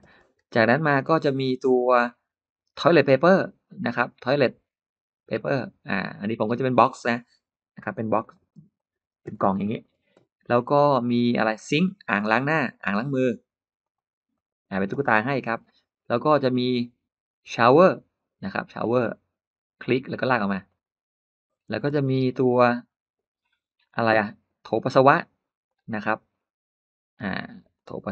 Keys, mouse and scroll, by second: 0.0 space, 0.1 space, 0.7 middle click, 1.3 middle click, 1.9-2.2 scroll up 1, 5.7 click, 6.5 click, 8.0 click, 8.6 click, 9.1 space, 9.2 scroll up 3, 9.4 middle click, 9.6 scroll down 1, 9.8 scroll up 1, 12.0 click, 12.6 click, 13.7 click, 14.2 click, 14.8 middle click, 15.4-15.7 scroll down 1, 16.1-16.4 scroll up 1, 17.4 click, 18.6 click, 19.9 click, 20.5 click, 21.8 space, 23.0-23.7 scroll down 4, 24.6 click, 25.5 click, 26.1-26.4 scroll up 2, 27.0 click, 27.6 click.